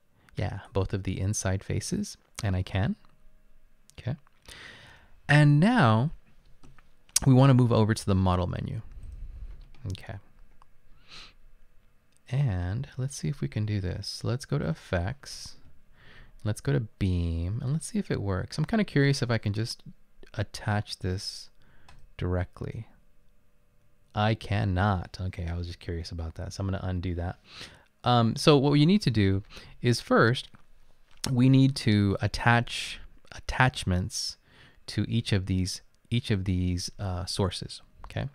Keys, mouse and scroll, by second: 26.0 ctrl+z.